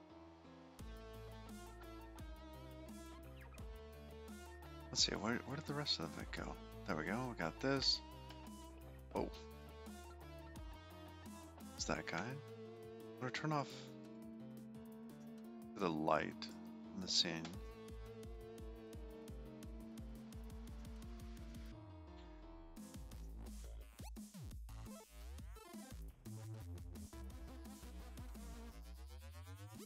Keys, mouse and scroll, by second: 6.9 click, 7.5 middle click, 10.0 middle click, 10.2 middle click, 10.6 middle click, 14.0 click, 14.6 click, 16.9 click, 17.2-17.5 scroll down 4, 18.9 click, 20.2 middle click, 21.5 scroll down 5, 21.9-22.6 scroll up 9, 22.7 shift+middle click, 23.4 middle click, 27.8 End, 28.6-29.4 scroll down 5, 29.4 middle click.